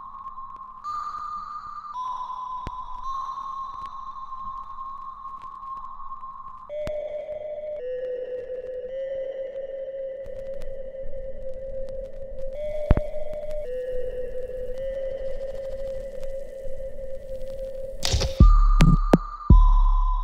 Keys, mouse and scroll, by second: 1.5 click, 3.3 right click, 4.5 click, 4.8 alt+right click, 5.2 alt+click, 5.8 alt+middle click, 6.3 alt+right click, 7.1 right click, 7.8 click, 8.5 right click, 9.6 ctrl+z, 10.2-12.2 alt+right drag, 13.1 shift+click, 13.5 shift+right click, 14.4-17.2 shift+drag, 17.5 ctrl+z, 18.4 shift+click.